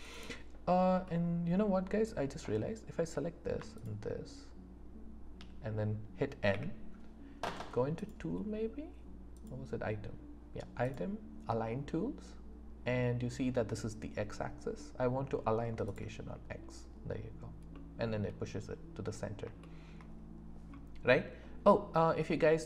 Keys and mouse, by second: 0.0 click, 1.0 click, 1.0 right click, 1.7 middle click, 6.5 n, 7.9 click, 9.4 click, 10.8 click, 15.9-17.7 drag, 17.7-19.1 middle drag, 19.6 shift+middle click.